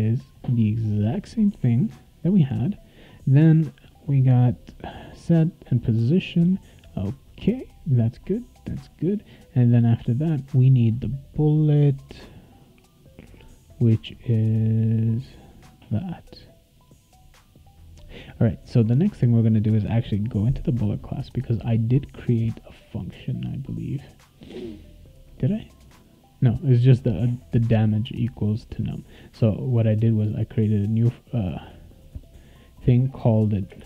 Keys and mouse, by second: 1.5 BackSpace, 3.0 click, 3.6 click, 19.9 click, 21.8 click, 25.5 click, 30.7 click, 30.9 click, 32.1 click, 33.7 space, 33.8 =.